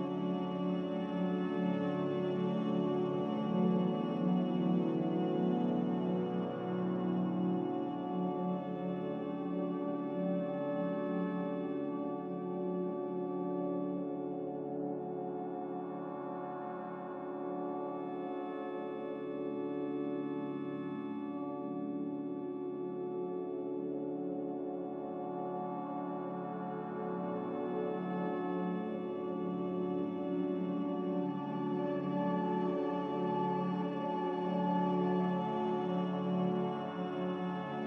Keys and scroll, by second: 3.9 m, 6.0 Escape, 20.7 a, 36.9 m.